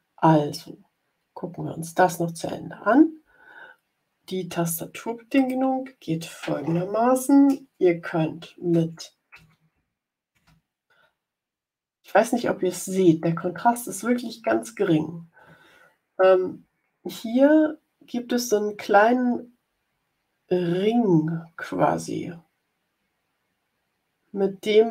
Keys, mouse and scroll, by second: 5.3 click, 8.3 Left, 9.2 Up, 9.7 Right, 10.0 Up, 11.2 Up, 12.8 Up, 13.6 Down.